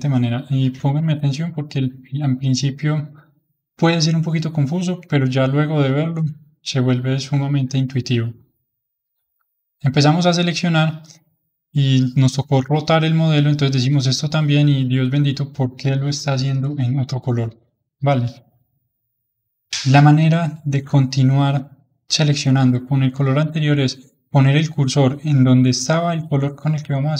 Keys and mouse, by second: 7.4-13.3 middle drag, 14.0-17.1 drag, 18.6-25.5 middle drag.